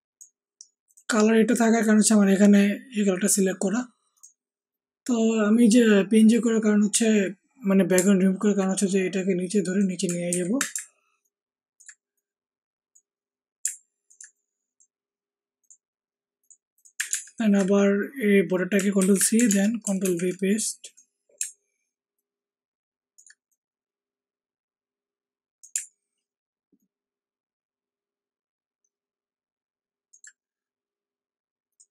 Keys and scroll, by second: 10.2 ctrl+t, 17.0 alt+Tab, 18.9 ctrl+c, 19.4 ctrl+alt+Tab, 20.0 ctrl+alt+v.